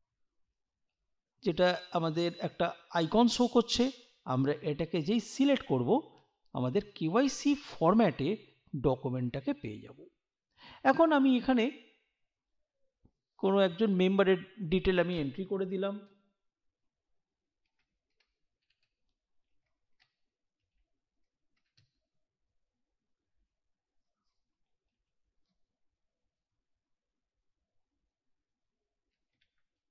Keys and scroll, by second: 14.1 space, 17.6 shift+m, 18.1 r, 18.6 ., 18.9 space, 19.9-22.1 typing, 24.5 space, 28.9-29.8 typing.